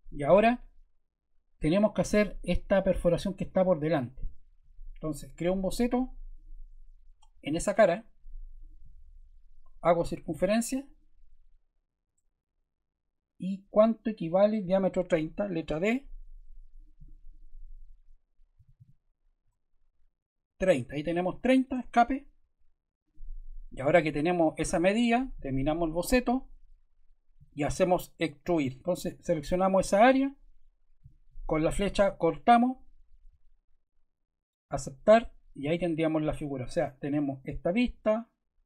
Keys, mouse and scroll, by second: 6.3 click, 8.5 click, 10.0 click, 10.8 click, 12.0 super+z, 15.6 d, 16.7 click, 17.3 click, 18.3-19.2 typing, 19.4 Return, 21.7 ⟲, 33.5 click, 34.7 click.